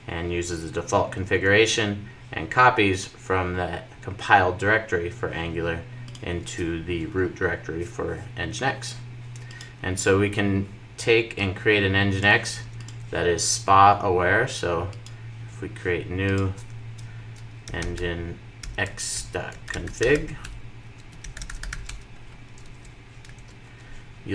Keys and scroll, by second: 22.2 super+v, 23.0 super+s.